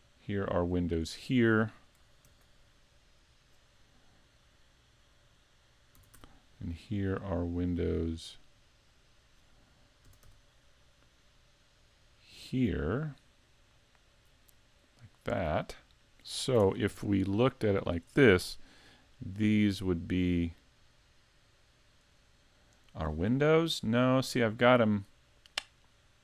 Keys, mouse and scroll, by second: 0.9 click, 2.3 ctrl+r, 5.4 click, 6.0 s, 9.1 right click, 10.1 s, 15.4 click, 16.6 ctrl+Tab, 17.7 right click, 18.8 shift+right click, 19.4 right click, 20.2 right click, 22.1 shift+right click, 22.8 shift+right click.